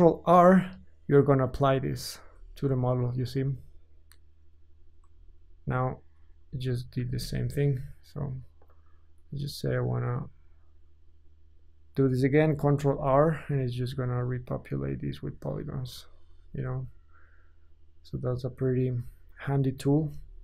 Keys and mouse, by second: 2.3 ctrl+r, 5.2 Tab, 6.5-7.5 middle drag, 7.1 Tab, 7.5-13.5 drag, 13.3 ctrl+r, 13.9 click, 14.1-18.7 shift+drag, 19.0-20.4 alt+shift+drag.